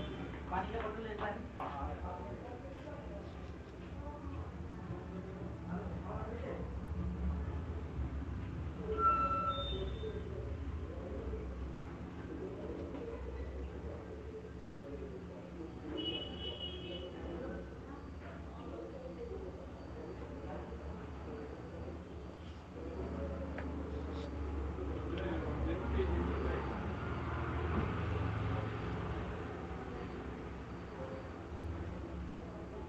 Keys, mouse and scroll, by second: 1.6 click, 1.8 click, 2.2 click, 2.8 click, 3.5 click, 4.3 click, 5.1 middle click, 5.5 click, 5.7 click, 6.5 click, 7.4 click, 7.9 click, 8.8 click, 9.4 click, 10.0 click, 11.0 click, 12.1 click, 12.9 click, 13.7 click, 14.5 click, 15.3 click, 16.4 click, 16.4-17.4 scroll, 17.4 click, 18.1 click, 19.2 click, 20.0 click, 21.2 click, 21.7 click, 23.6-24.2 alt+click, 24.2 click, 24.9 click, 25.1 click, 25.8 click, 26.2 click, 26.8 click, 28.8 click, 30.5 click, 31.5 click, 32.5 click.